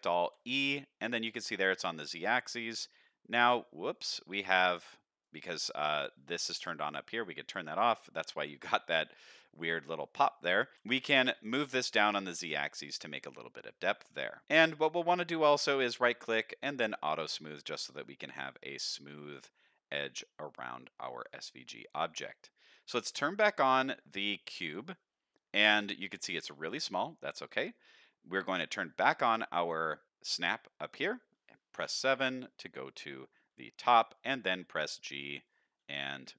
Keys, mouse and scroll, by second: 0.2 e, 7.1 click, 13.6 middle click, 14.4 Tab, 14.6 middle drag, 14.6 scroll down 2, 15.0-15.5 scroll up 2, 15.3 middle drag, 15.8-17.3 right drag, 17.3 middle click, 18.6 middle drag, 20.2-20.8 middle drag, 21.0-22.2 scroll down 5, 21.5-22.4 middle drag, 22.5-22.8 scroll down 1, 24.7 click, 25.1 middle drag, 25.5-26.8 scroll down 4, 26.2-26.9 middle drag, 27.2 middle drag, 29.0 click, 29.5-29.9 middle drag, 31.8 KP_7, 33.4-34.8 scroll up 4, 34.1 g, 35.7-36.3 middle drag.